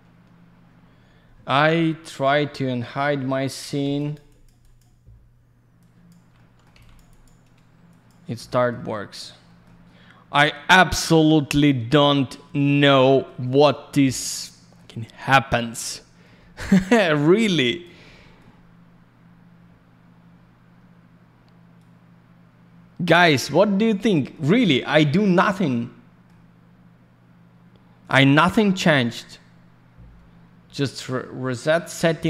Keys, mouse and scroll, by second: 0.0-0.8 scroll down 1, 3.8 alt+я, 3.9 click, 4.1 click, 4.2 click, 4.4 double click, 4.6 click, 4.7 click, 5.7 click, 6.7 alt+h, 6.9 click, 7.0 click, 7.2 double click, 7.8 click, 8.0 click, 8.4 alt+middle click, 9.5 alt+middle click, 9.6 alt+middle click, 11.5 alt+middle click, 13.0 middle click, 13.9 alt+middle click, 16.3 middle click, 17.4 click, 18.0 alt+middle click, 21.7 click, 24.0 alt+middle click, 24.4 alt+я, 24.5 click, 25.6 alt+middle click, 31.1 alt+middle click, 32.0 middle click.